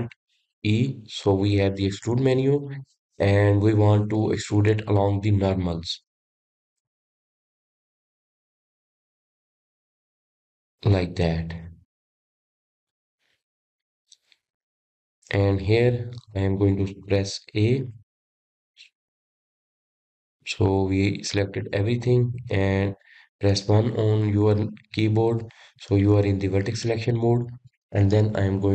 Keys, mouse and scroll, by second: 2.0 alt+e, 12.2-14.3 middle drag, 14.3 click, 14.8-17.9 middle drag, 21.8 a, 22.6-25.7 middle drag, 26.6 1, 27.4-28.7 middle drag.